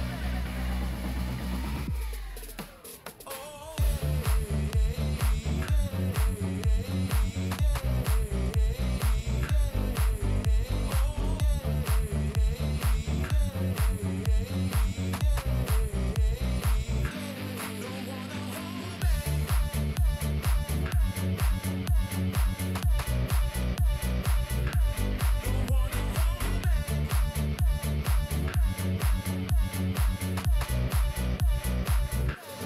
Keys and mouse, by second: 2.5 shift+middle click, 4.0 alt+click, 15.1 g, 19.2 ctrl+click, 26.3 KP_Decimal, 28.2 shift+middle click, 29.0 click, 29.9 g, 31.3 g.